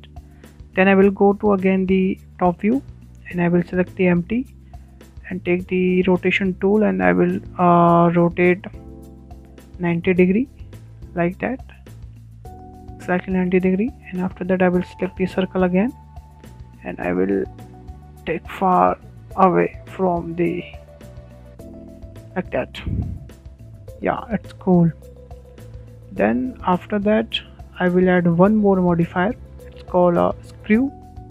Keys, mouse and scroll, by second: 1.2-2.7 middle drag, 2.5 `, 2.7 `, 4.3-5.6 shift+middle drag, 5.6 click, 6.6-9.0 drag, 9.9 click, 11.3 click, 15.1-15.5 scroll up 4, 15.5 shift+middle click, 16.2 click, 16.5 Tab, 16.7 Tab, 17.3-18.2 shift+middle drag, 18.2 click, 23.7-24.6 shift+middle drag, 24.4 Tab, 24.6 Tab, 24.8-25.2 scroll down 5, 25.2-26.5 middle drag, 26.5-26.8 scroll up 3, 26.8-28.2 middle drag, 28.2 scroll up 1, 28.4-30.1 shift+middle drag, 30.1 click.